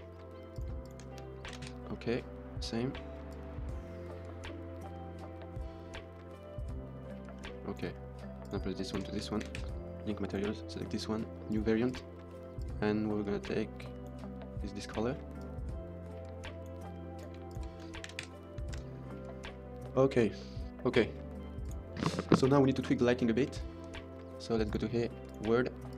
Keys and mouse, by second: 0.4 click, 0.7 shift+click, 1.5 ctrl+l, 3.2 click, 8.3 click, 8.7 shift+click, 9.3 ctrl+l, 10.2 click, 11.5 click, 11.7 click, 15.3 click, 17.1 click, 17.4 shift+click, 18.0 ctrl+l, 18.7 ctrl+s, 23.5 shift+middle click, 24.6-25.2 drag, 25.7 click.